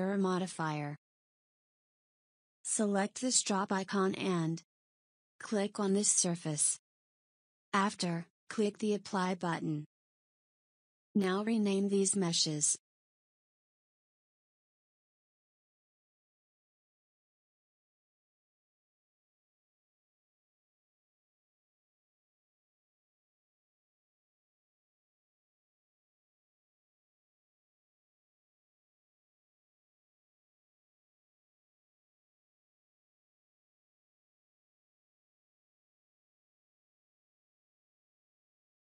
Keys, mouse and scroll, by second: 2.9 click, 8.0 click, 13.8 KP_1, 14.4-14.7 scroll down 3, 14.7-15.3 shift+middle drag, 15.3-16.5 scroll down 1, 16.5 click, 17.3 click, 17.4-18.9 drag, 20.0 click, 20.6-22.2 drag, 26.2 click, 27.2 click, 27.3-28.8 drag, 31.5 click, 32.5-33.6 middle drag, 33.6 click, 34.3 click, 34.5-36.0 drag, 38.1 KP_1.